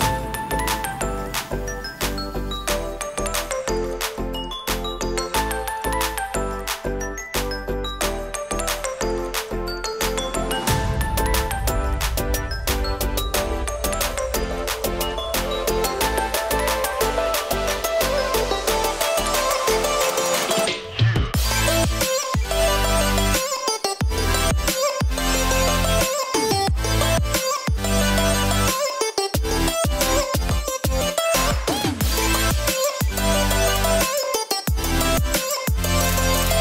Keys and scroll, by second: 0.0-0.6 typing, 0.9 Return, 8.2-14.3 typing, 9.3 Tab, 12.3 Tab, 19.5-19.8 scroll down 1, 19.8-20.3 scroll up 1, 20.3 typing, 21.3-22.4 scroll down 1, 22.4-23.2 scroll up 1, 23.2 typing, 29.3 ctrl+0.